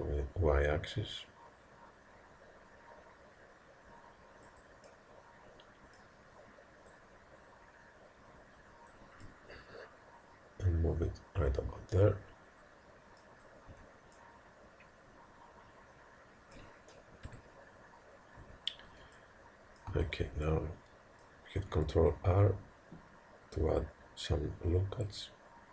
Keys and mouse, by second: 4.9-6.9 middle drag, 6.9 click, 9.3-11.4 middle drag, 13.7 Tab, 14.1-15.3 middle drag, 15.6-17.1 middle drag, 17.4 KP_1, 18.5 Tab, 19.9 a, 22.1 ctrl+r.